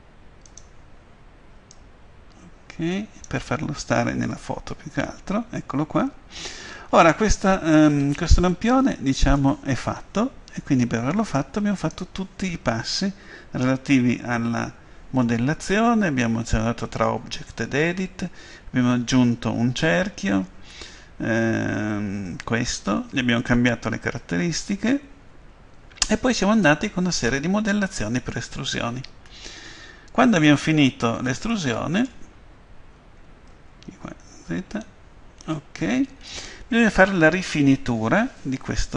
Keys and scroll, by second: 0.5 s, 4.4 F12, 6.8 Escape, 33.6 ctrl+z.